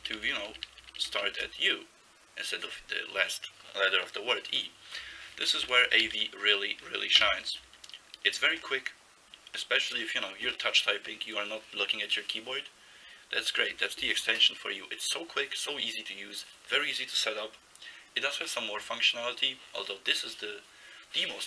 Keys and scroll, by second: 0.0 ctrl+b, 0.2 ctrl+b, 0.3 ctrl+b, 0.5 ctrl+b, 0.6 ctrl+b, 0.8 ctrl+b, 1.0 ctrl+b, 5.6 alt+s, 6.0-7.8 typing.